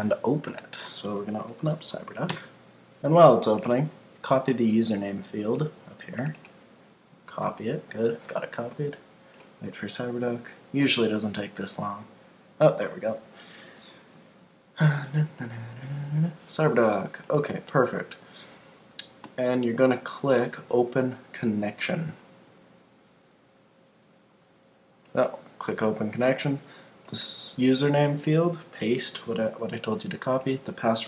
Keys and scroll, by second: 2.3 Return, 7.3 super+c, 29.0 super+v.